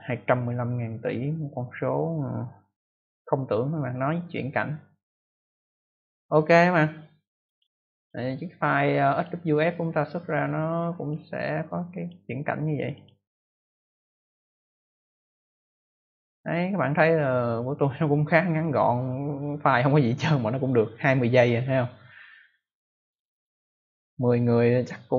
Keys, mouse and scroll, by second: 7.4 click, 9.0 click, 10.9 click, 11.9 click, 12.7 click, 12.9 click, 13.0 double click.